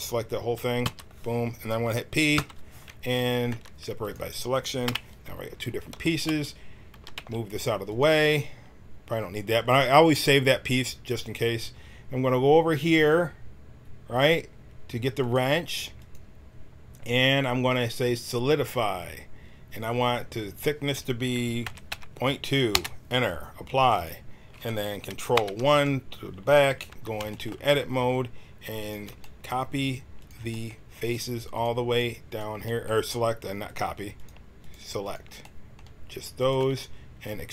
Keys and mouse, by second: 0.8 l, 2.3 p, 3.5 Tab, 4.8 KP_1, 6.9 g, 15.2-18.3 drag, 23.9-25.3 drag, 25.3 ctrl+KP_1, 26.8 Tab, 28.7 right click, 30.3-37.5 drag.